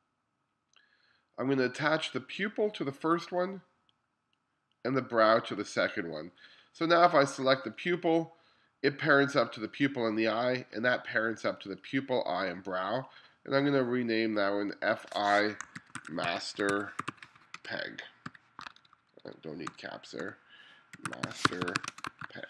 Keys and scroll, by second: 15.5-18.6 typing, 20.3-22.4 typing.